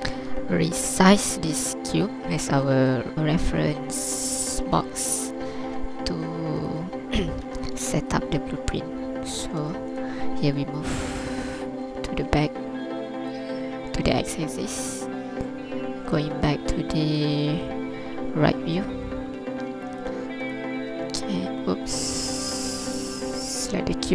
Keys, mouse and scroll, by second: 3.1 shift+right click, 3.1 shift+click, 3.1 scroll down 1, 5.2 KP_3, 5.8 z, 7.0-7.3 scroll up 1, 7.4 alt+a, 8.0 ctrl+click, 8.3 scroll down 2, 8.7 shift+click, 9.6 Tab, 9.9 right click, 10.9 click, 14.5 KP_3, 15.1 scroll up 2, 16.4 ctrl+click, 17.0 scroll up 2, 17.4 scroll down 2, 19.9 right click, 20.5 right click, 21.2 Tab, 22.4 right click.